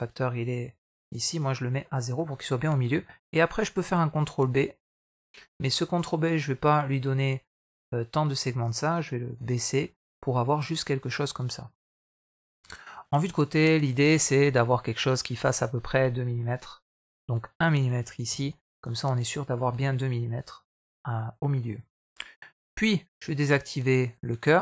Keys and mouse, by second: 1.9 middle click, 2.5 middle click, 3.6 ctrl+b, 8.5 click, 8.7 click, 9.2 click, 9.8 middle click, 11.0 middle click, 12.0 KP_1, 13.1 KP_3, 14.3 shift+middle drag, 17.1-18.4 drag, 19.7 middle click, 21.4 middle click, 23.5 click, 23.9 click.